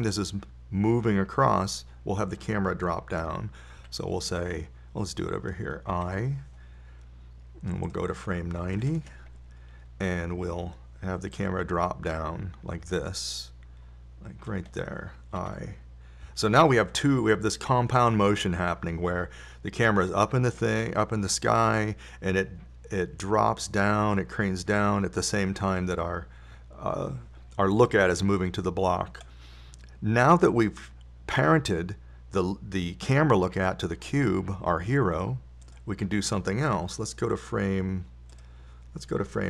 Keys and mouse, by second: 5.2 i, 7.3 i, 9.3 click, 10.8-15.2 middle drag, 17.7 i, 19.4-22.4 drag, 37.1-39.4 drag.